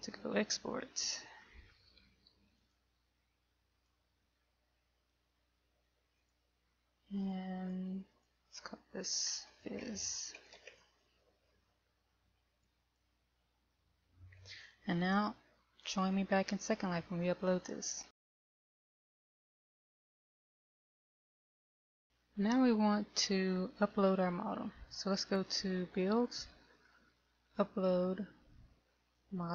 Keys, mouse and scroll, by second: 13.6 click.